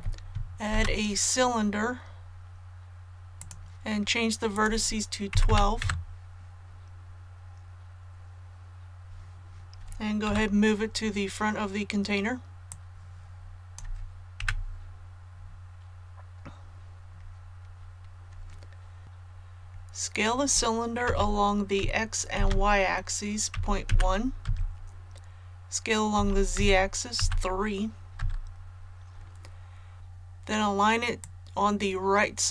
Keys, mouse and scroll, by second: 0.7 shift+a, 3.3 click, 5.3 KP_1, 5.4 KP_2, 10.2 KP_3, 12.6 click, 14.4 KP_1, 19.0 ctrl+z, 21.0 s, 22.3 shift+z, 23.5 KP_Decimal, 23.8 KP_1, 26.1 s, 26.5 z, 27.1 KP_3, 29.9 ctrl+z, 31.2-32.5 drag.